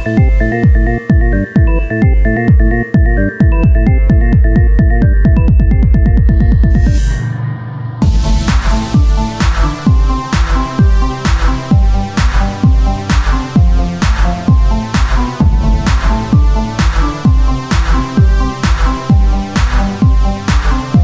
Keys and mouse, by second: 0.8 Tab, 1.4 ctrl+Tab, 2.0 click, 3.1 s, 5.2-7.5 drag, 5.3 s, 7.5 Tab, 7.5 click, 7.6 Tab, 8.1-9.5 drag, 9.5 e, 10.9 s, 13.2-15.7 drag, 13.2 z, 14.4 e, 16.0 z, 17.0 Tab, 20.0 Tab.